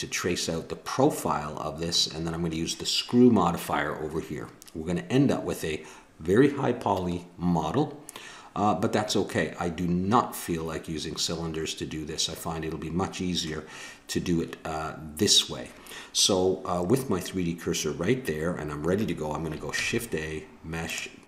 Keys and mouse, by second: 19.8 shift+a.